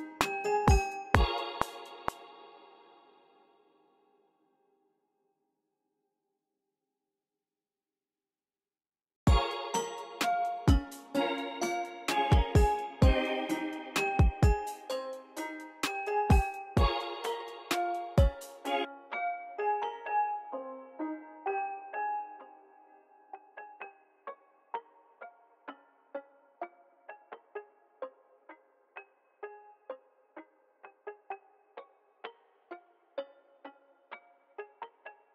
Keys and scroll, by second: 1.6-3.2 typing, 2.8 super+r, 3.9 alt+super+s, 9.1 space, 10.7 x, 12.1 x, 16.9 v, 17.2 v, 17.9 super+w, 18.5 s, 32.3 v, 33.2 v, 34.6 v, 35.0 x.